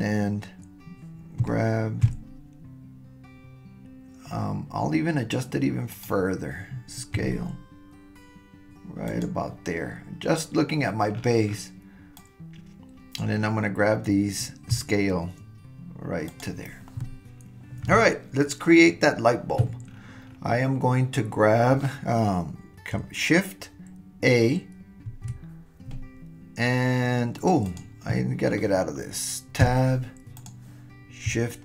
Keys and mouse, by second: 1.4 g, 7.2 s, 12.2-13.5 drag, 14.7 s, 25.1 shift+a, 27.6 click, 29.6 Tab.